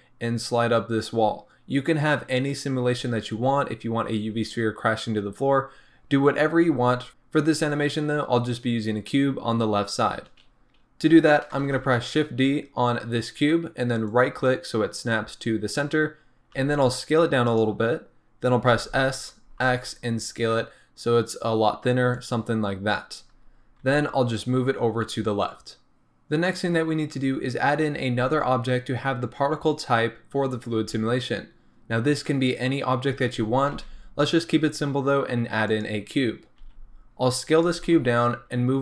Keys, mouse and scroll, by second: 11.6 shift+d, 14.2 right click, 16.5 s, 17.6 click, 18.7 s, 22.3 click, 23.4-23.8 scroll up 1, 23.8 g, 33.7 shift+a, 36.7 s, 38.3 g.